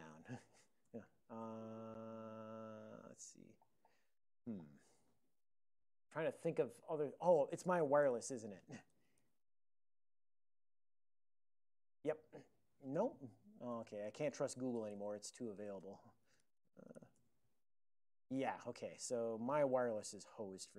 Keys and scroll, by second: 0.4 ctrl+g, 1.0-1.4 typing, 3.6 ctrl+g, 4.6 ctrl+g, 8.1 super+Return, 8.5-11.2 typing, 13.7 ctrl+c, 14.2 ctrl+p, 14.8 alt+BackSpace, 14.9 alt+BackSpace, 14.9-17.5 typing.